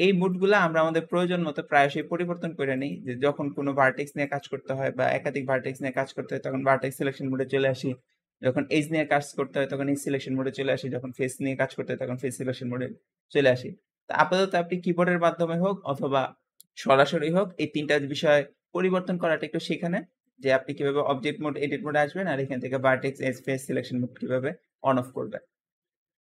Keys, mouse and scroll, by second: 0.1-4.2 drag, 5.0-8.0 scroll up 1, 20.1-23.2 drag.